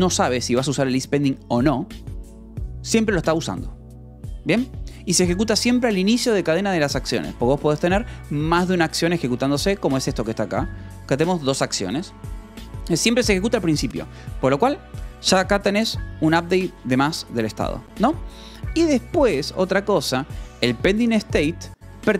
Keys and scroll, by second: 0.1-1.0 typing, 4.9 Escape, 8.7-12.2 typing, 10.0 Escape, 12.0 Escape, 21.0-22.1 typing, 21.8 Escape.